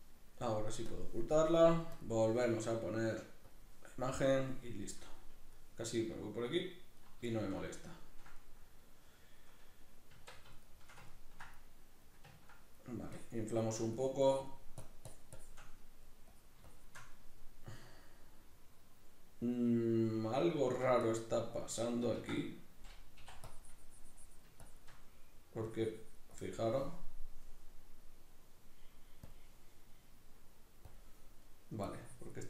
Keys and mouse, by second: 0.9 click, 4.9-7.0 middle drag, 7.0 right click, 7.3-13.3 shift+middle drag, 10.1 Tab, 13.3-15.8 drag, 15.8 middle click, 16.3 click, 17.1-21.1 middle drag, 21.1 click, 21.6 middle click, 22.2 ctrl+z, 22.5 middle click, 23.4-25.0 drag, 25.0 middle click, 25.6-28.0 drag, 28.0-29.2 middle drag, 29.2-29.9 drag, 29.9-30.8 middle drag, 30.8 click, 31.4 middle click, 31.9-32.4 drag.